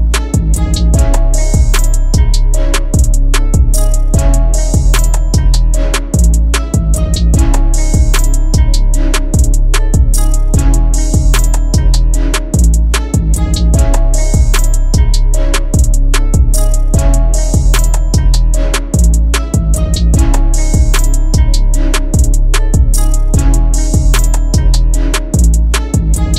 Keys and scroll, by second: 6.5 7, 7.2 /, 7.8 9, 8.8 Return, 23.2 2, 24.2 /, 24.6 7, 25.6 Return.